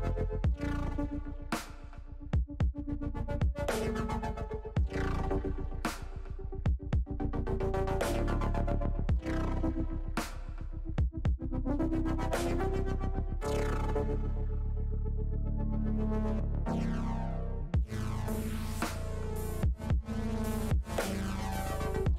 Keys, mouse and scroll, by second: 7.0 click, 9.1 ctrl+KP_Add, 9.2 ctrl+KP_Add, 9.3 ctrl+KP_Add, 9.5 ctrl+KP_Add, 9.6 ctrl+KP_Add, 9.8 ctrl+KP_Add, 10.0 ctrl+KP_Add, 10.1 ctrl+KP_Add, 10.3 ctrl+KP_Add, 10.5 ctrl+KP_Add, 10.9 ctrl+KP_Subtract, 11.1 ctrl+KP_Subtract, 12.8-13.8 drag, 16.5 shift+middle click, 18.1-19.1 middle drag, 19.6 click, 20.4 middle click.